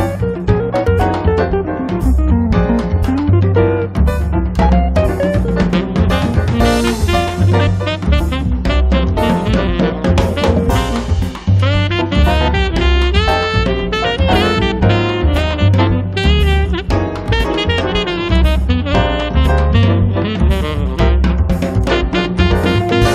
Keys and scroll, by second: 7.8 space.